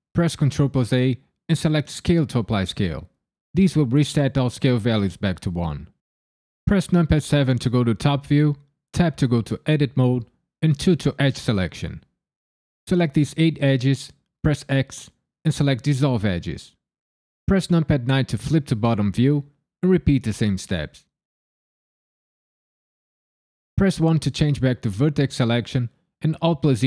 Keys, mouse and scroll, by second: 0.4 ctrl+a, 6.9 KP_7, 8.9 Tab, 10.7 2, 11.6 click, 11.9 shift+click, 12.3 shift+click, 12.7 shift+click, 13.0 shift+click, 13.4 shift+click, 13.8 shift+click, 14.2 shift+click, 14.6 x, 18.0 KP_9, 18.9 click, 19.4 shift+click, 19.8 shift+click, 20.2 shift+click, 20.5 shift+click, 20.9 shift+click, 21.3 shift+click, 21.6 shift+click, 22.2 x, 23.7 1, 26.4 alt+z.